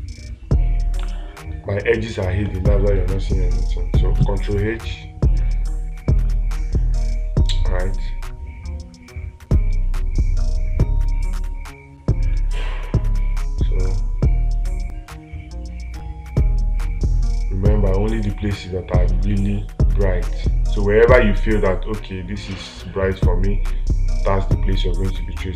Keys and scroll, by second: 1.4 space.